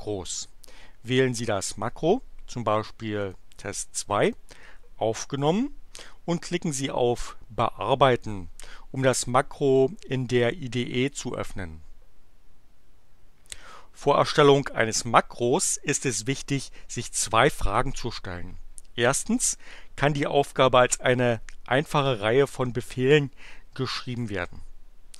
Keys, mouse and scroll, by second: 3.2 click, 4.2 click, 8.1 click.